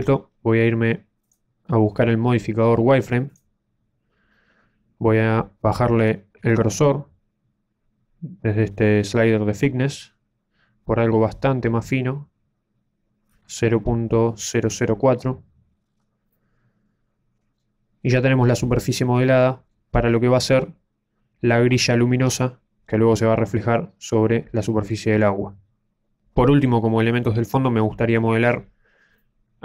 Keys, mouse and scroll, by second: 1.2 Tab, 1.2 click, 6.0 click, 15.8-16.2 scroll up 5, 16.2 middle click, 18.7-19.4 scroll down 3, 19.2 middle click, 22.8-23.4 scroll down 3, 29.1 middle click.